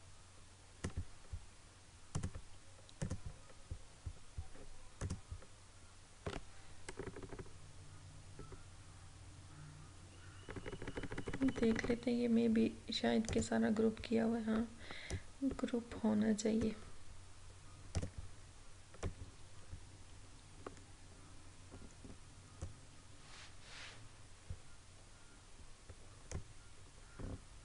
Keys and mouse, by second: 7.1 Right, 10.6 Right, 13.4-25.0 drag, 26.4-27.6 drag.